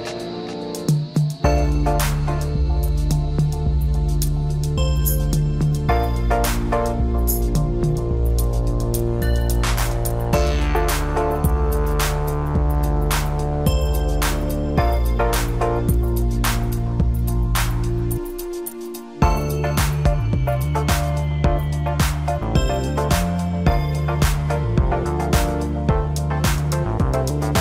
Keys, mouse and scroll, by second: 1.1 click, 2.4 g, 8.1-8.7 middle drag, 8.7-9.2 scroll up 1, 9.2-9.5 scroll up 3, 9.5-10.9 middle drag, 10.9 scroll down 4, 11.2-12.7 middle drag, 12.7 KP_1, 14.2-16.1 middle drag, 16.1 drag, 16.5-19.5 middle drag, 20.7 click, 21.1-22.5 middle drag, 22.5-23.0 drag, 23.0-26.1 middle drag.